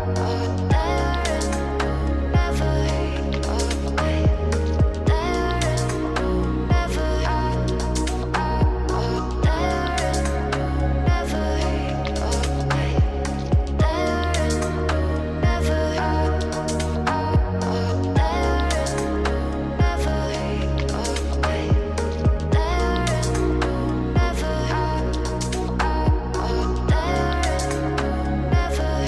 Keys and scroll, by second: 8.4 ctrl+2, 12.2 ctrl+alt+2, 28.6 ctrl+2.